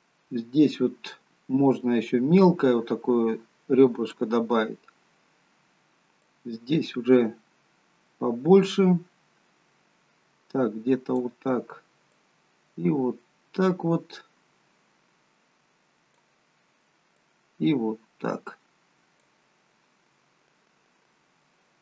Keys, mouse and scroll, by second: 6.3 click, 12.2 click, 17.2 click, 21.1-21.8 scroll down 2, 21.5 middle click.